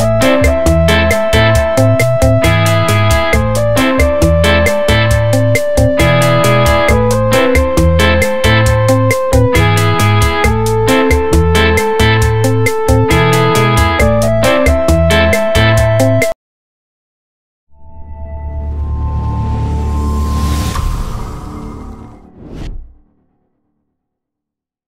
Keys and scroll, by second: 0.0-4.0 typing, 4.8 Right, 5.0 Return, 6.1 ctrl+t, 9.7 Return, 10.1 F7, 10.8 v.